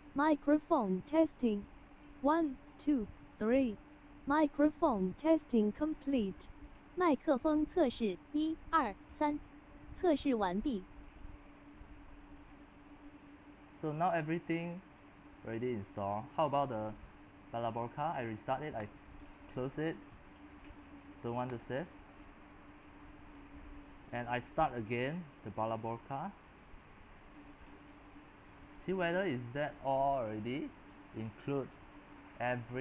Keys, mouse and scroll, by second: 0.0-2.3 drag, 2.3-3.5 middle drag, 2.3 scroll, 2.7-3.3 scroll, 3.3 scroll, 4.0-5.6 middle drag, 4.0 scroll, 5.6 s, 6.5 middle click, 6.9 s, 7.4 click, 8.0-11.1 typing, 9.8-10.4 scroll up 11, 12.5-15.5 drag, 16.1-32.8 drag.